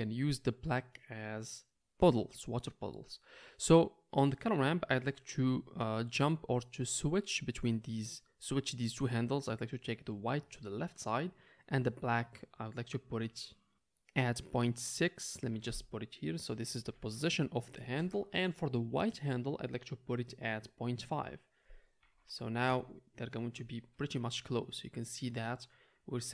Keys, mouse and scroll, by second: 4.4 click, 4.4 middle click, 5.0-5.5 drag, 5.8-8.4 right drag, 8.4-18.5 drag, 8.5-26.3 middle drag, 8.5-18.5 right drag.